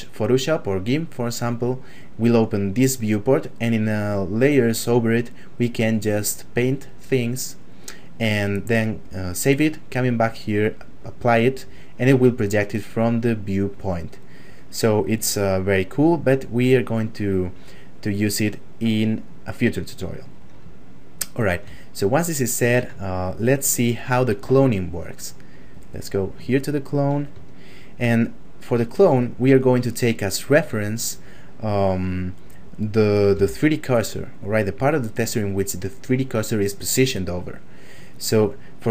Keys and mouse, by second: 15.3 click, 20.8 shift+middle click, 21.8 ctrl+middle click, 23.1 shift+middle click, 24.9 click, 26.6 shift+middle click, 27.5 ctrl+middle click, 33.3 f, 34.0 click, 37.4 shift+middle click.